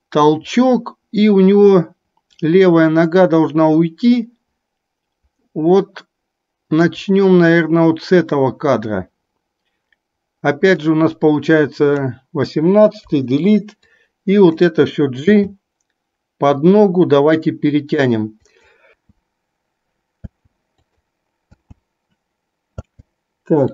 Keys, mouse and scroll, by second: 15.5 g, 19.0 space, 20.4 space, 21.0-21.6 drag, 21.6 space, 22.9 space.